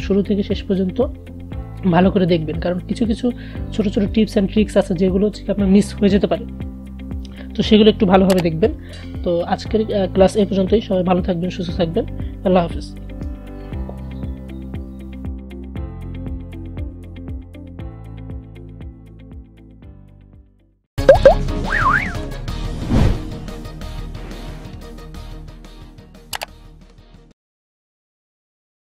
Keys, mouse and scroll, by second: 17.6 click.